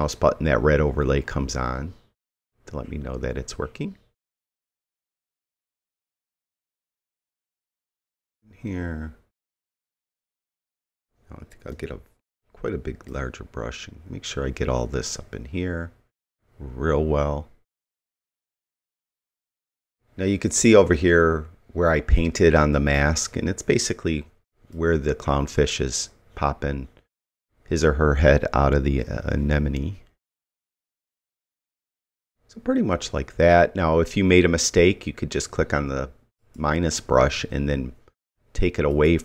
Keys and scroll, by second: 11.7 ].